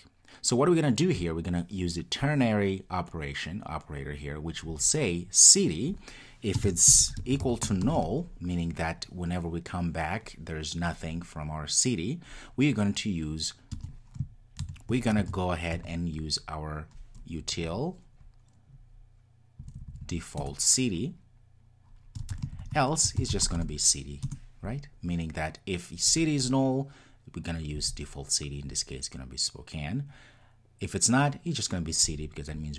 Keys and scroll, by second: 20.4 Return.